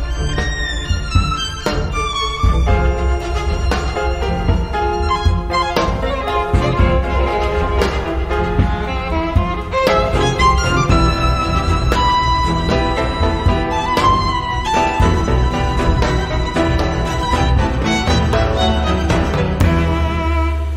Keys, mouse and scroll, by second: 0.5-1.9 scroll down 3, 2.7 click, 3.8 click, 5.5 click, 7.2 0, 9.2 click, 10.1 click, 11.1-12.0 typing, 13.5 click, 14.8 x, 15.2 i, 16.3 BackSpace, 16.7 1, 18.7-20.5 drag.